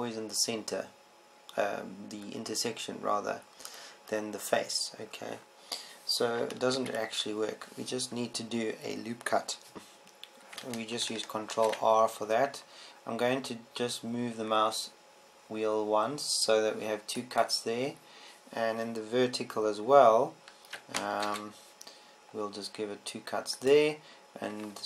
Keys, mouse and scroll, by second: 8.6 ctrl+z, 13.1 ctrl+r, 22.8 ctrl+r.